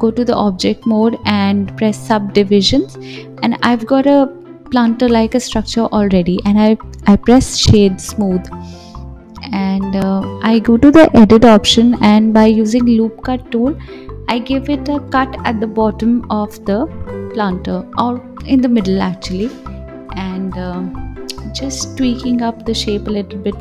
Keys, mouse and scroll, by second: 0.0-5.9 drag, 5.9-8.7 right drag, 8.7-10.8 drag, 10.8 ctrl+r, 17.3 s, 19.1 click, 20.3 g.